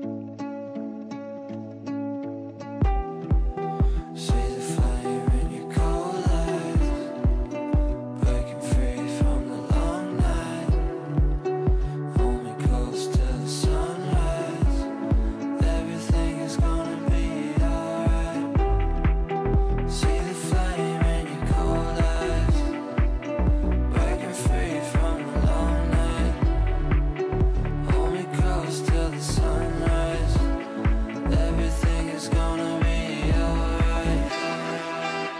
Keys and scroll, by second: 24.7 ctrl+q.